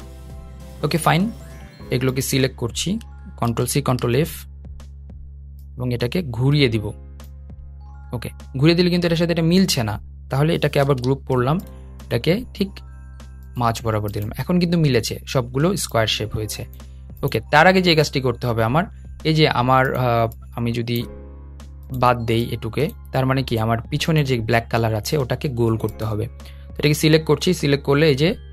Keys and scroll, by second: 3.2 shift+super+c, 3.5 shift+super+f, 10.5 super+g.